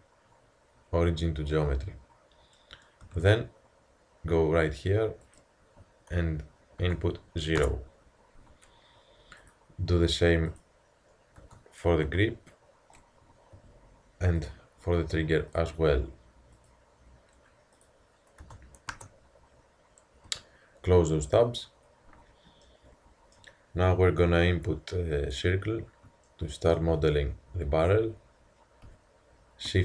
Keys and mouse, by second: 3.1 n, 5.3-7.1 drag, 9.5-12.6 drag, 13.0-14.5 middle drag, 13.6 a, 14.5-17.4 drag, 17.8-19.7 drag, 20.4 n, 21.2 t, 22.7-23.0 drag, 24.2 KP_1, 28.9 a.